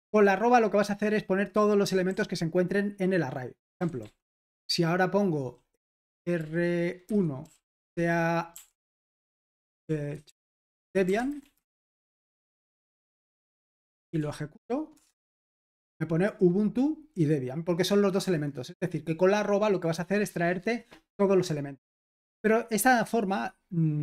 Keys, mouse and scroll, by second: 0.0 typing, 2.1 typing, 3.8-13.0 typing, 9.3 Escape, 13.7 super+h, 14.2 ctrl+p, 15.6 Return.